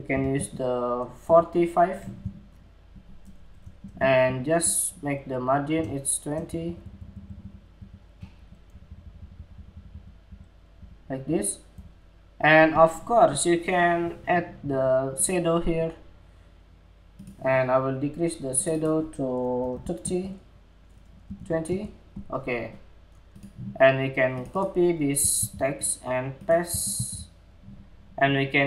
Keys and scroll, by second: 3.3 alt+Right, 5.3 alt+Left, 6.0 alt+Left, 6.2 alt+Left, 6.3 alt+Left, 6.8 alt+Left, 6.9 alt+Left, 7.3 alt+Left, 24.9 super+c, 26.5 shift+super+v.